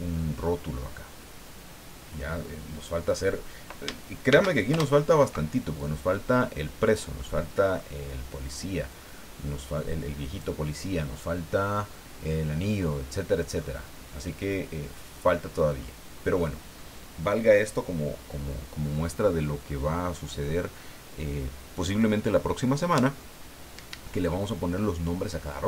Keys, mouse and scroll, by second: 4.3 shift+d, 4.7 shift+Return, 5.8-7.1 drag, 7.2 middle click, 8.9-10.6 drag, 13.2 scroll down 1, 13.6-15.5 middle drag, 15.7-16.0 scroll up 1, 16.3 scroll up 1.